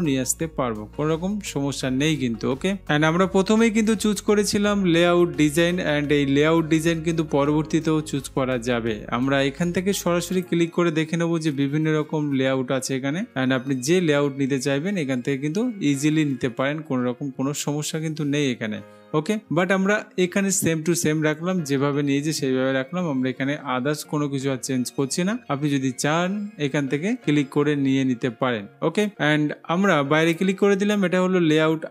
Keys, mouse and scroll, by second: 10.6-11.6 drag, 30.5-31.5 drag.